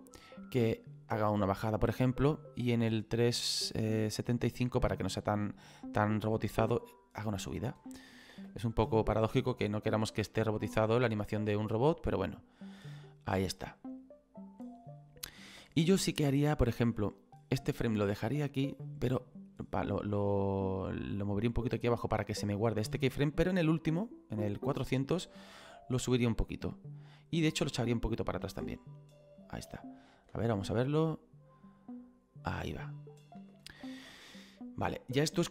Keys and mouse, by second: 0.9 click, 2.5 click, 6.2 click, 7.8 click, 8.3 space, 15.6 space, 16.2 click, 18.3 click, 21.4 click, 23.5 click, 25.7 click, 27.6 click, 29.4 click, 30.3 space, 33.4 space, 34.0 click.